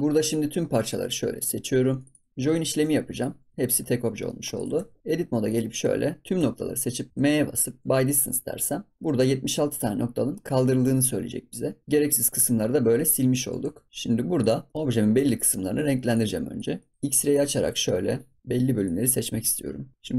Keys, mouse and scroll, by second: 0.1 click, 2.0 drag, 2.3 Tab, 2.4 ctrl+j, 3.0 click, 3.7 scroll up 3, 3.9 scroll down 2, 4.2 middle drag, 4.5 click, 4.7 Tab, 5.4 click, 6.3 a, 7.1 m, 11.8 ctrl+s, 11.9 middle click, 12.7 scroll down 3, 12.9 middle click, 13.2-13.6 scroll up 1, 13.6 Tab, 13.9 scroll up 2, 13.9 scroll down 2, 14.3 click, 14.6 middle click, 15.1 Tab, 16.0 click, 16.7 middle click, 17.0 KP_1, 18.4 ctrl+s, 18.8 click, 19.9-20.1 middle drag.